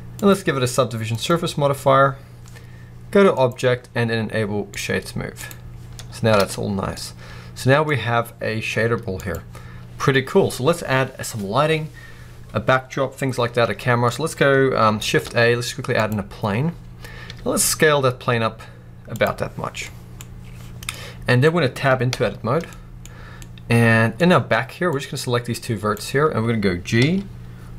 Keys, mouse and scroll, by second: 5.7-6.3 scroll down 2, 6.3 alt+a, 6.6 scroll down 1, 6.8-9.0 middle drag, 7.8-9.0 scroll up 1, 9.0-13.9 drag, 13.9-19.0 middle drag, 14.9 shift+a, 16.1-16.6 scroll down 2, 17.1 s, 19.1 click, 20.8 middle click, 21.9 Tab, 22.6 middle click, 23.3 middle click, 23.7-24.7 middle drag, 24.7 click, 26.8 g.